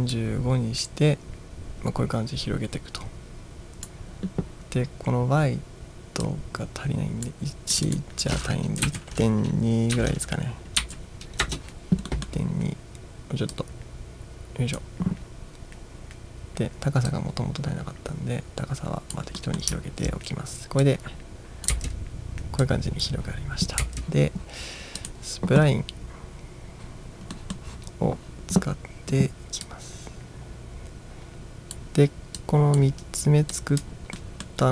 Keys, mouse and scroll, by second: 0.2-3.9 drag, 6.3-7.4 drag, 7.8 click, 8.9 Right, 10.0 BackSpace, 10.9 2, 11.5 Return, 12.2-12.5 middle drag, 13.6 click, 17.2-19.3 drag, 19.5 middle click, 20.9-21.8 drag, 21.8 space, 22.7-23.1 drag, 23.9 space, 25.1 click, 27.4 middle click, 29.7-31.8 drag, 32.4-32.8 drag, 33.6-33.9 drag, 34.2-34.5 middle drag.